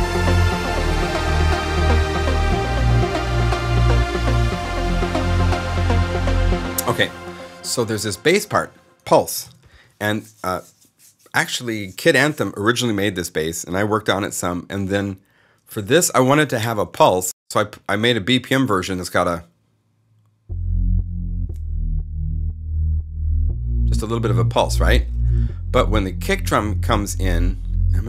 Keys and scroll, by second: 6.5 0, 9.4 alt+s, 15.6 0, 17.2 Return.